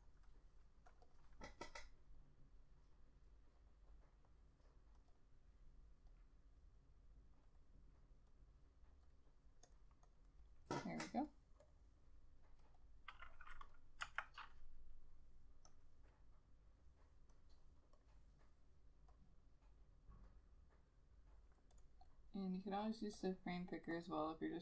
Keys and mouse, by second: 5.2 double click, 10.2 double click, 14.2 F6.